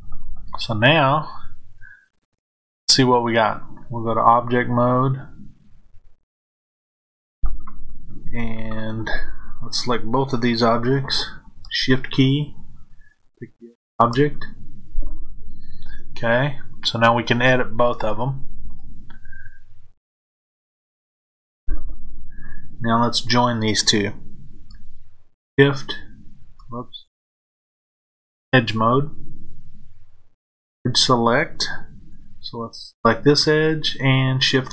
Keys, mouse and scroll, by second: 5.3-13.1 middle drag, 13.1 shift+click, 18.6-25.3 drag, 28.0 click, 32.1 click, 33.9 shift+click.